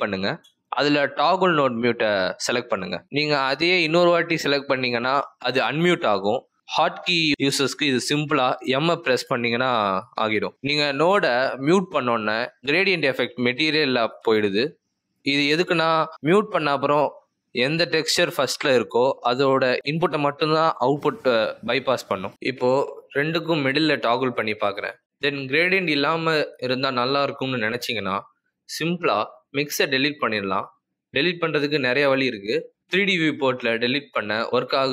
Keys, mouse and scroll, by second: 4.8 right click, 10.1 m, 12.3 m, 30.9 m, 31.8 m, 33.5 m.